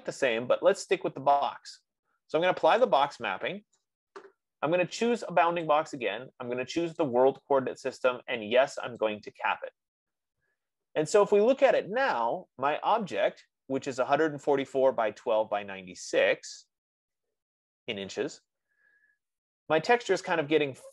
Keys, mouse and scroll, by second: 3.5 click, 6.1 click, 7.4 click, 9.5 click, 19.5-20.9 scroll.